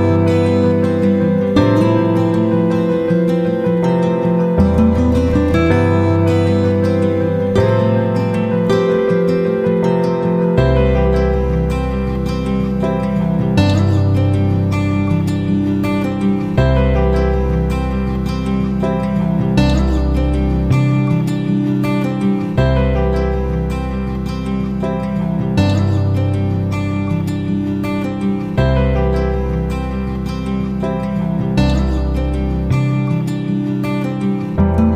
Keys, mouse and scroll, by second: 14.6 shift+click, 15.6 click, 19.2 click, 21.3-24.0 drag, 24.3 ctrl+g, 25.3 click, 31.1 shift+click.